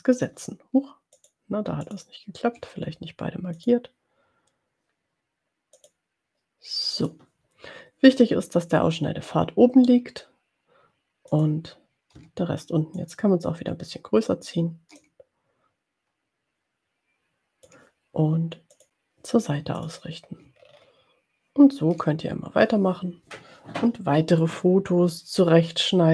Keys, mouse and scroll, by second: 1.3 click, 4.0 click, 6.1 click, 7.2 click, 11.5 click, 13.4-14.9 ctrl+drag, 15.5-18.0 ctrl+drag, 18.9 click, 19.8 click, 20.9 ctrl+scroll down 2.